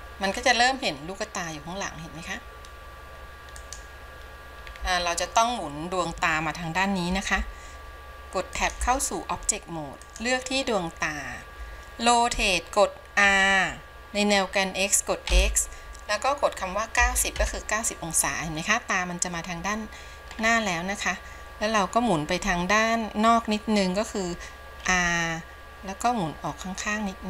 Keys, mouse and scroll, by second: 0.7-1.5 scroll up 2, 1.5-3.7 scroll up 1, 3.7-4.9 drag, 4.9-6.9 scroll down 2, 7.5 ctrl+Tab, 10.1 click, 13.5 r.